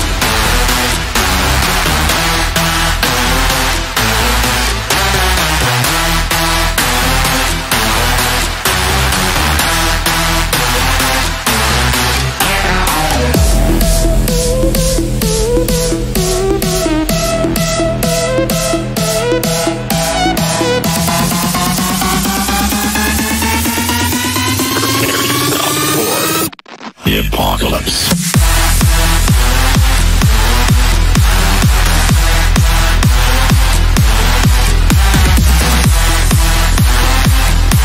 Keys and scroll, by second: 4.3 e, 15.1 ctrl+r.